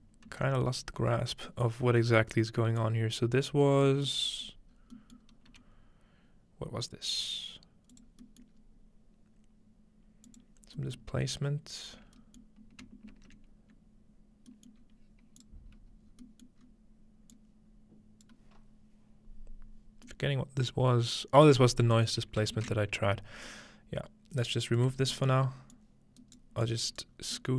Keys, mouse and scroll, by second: 0.3 ctrl+x, 0.6-1.5 scroll down 3, 1.5-1.8 scroll up 1, 1.8 scroll down 1, 2.8-4.9 drag, 3.7 scroll down 1, 4.2 scroll up 1, 4.7 scroll down 1, 4.9 scroll up 1, 5.5 g, 6.7 scroll up 1, 7.9-9.8 drag, 8.2-8.6 scroll down 2, 8.6 scroll up 2, 10.3-10.8 drag, 10.8-12.2 middle drag, 12.4-14.5 middle drag, 13.1 ctrl+space, 14.8-17.9 middle drag, 14.8-16.1 scroll up 1, 15.4 click, 16.1-16.6 scroll down 1, 16.6 scroll up 1, 17.3-19.2 drag, 20.1-23.1 middle drag, 23.5-24.9 alt+drag, 24.9-26.4 scroll down 2, 25.8-27.5 drag, 26.3-27.5 right drag, 27.1-27.5 scroll down 1.